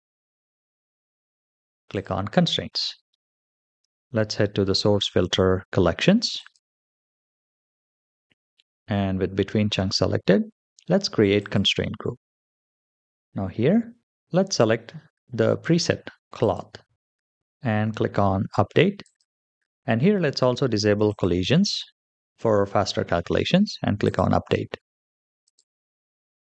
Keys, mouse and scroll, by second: 1.8 click, 6.2 click, 6.9-9.3 scroll down 5, 11.2 click, 12.6-13.5 scroll down 3, 13.5-14.3 scroll down 1, 16.3 click, 17.2 scroll down 3, 18.9 click, 20.9 click, 23.9 click, 25.3 click.